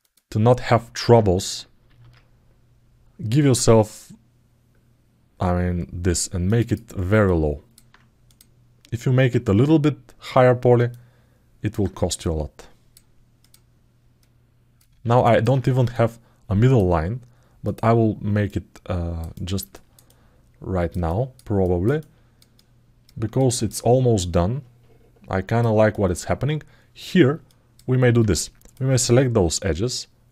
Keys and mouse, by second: 1.6 ctrl+b, 6.4 click, 7.0 middle click, 8.1 click, 10.6 alt+middle click, 12.0 click, 13.2 click, 14.0 click, 14.7 ctrl+z, 15.0 middle click, 15.7 click, 18.2 click, 19.1 middle click, 19.5 alt+middle click, 19.8 alt+middle click, 20.8 alt+shift+middle click, 21.8 ctrl+alt+middle click, 22.3 alt+middle click, 23.1 alt+shift+middle click, 23.9-25.4 alt+middle drag, 25.6 alt+shift+middle click, 27.2 alt+middle click, 28.5 click.